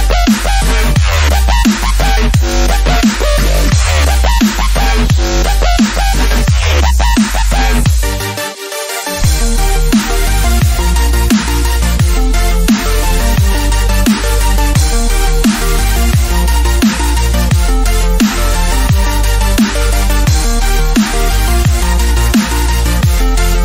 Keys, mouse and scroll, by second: 4.2-13.7 drag, 13.7-14.5 scroll down 1, 14.6 click, 15.4 alt+scroll up 1, 15.8 scroll down 1, 16.1-16.4 scroll up 1, 17.3 click, 18.4-18.8 alt+scroll down 1, 19.5-19.8 scroll up 1, 20.0-20.6 alt+scroll down 1, 20.6 alt+scroll up 2, 20.9 alt+scroll down 1, 21.9 alt+scroll down 1, 21.9-22.3 scroll up 1, 22.5-22.9 alt+scroll up 1.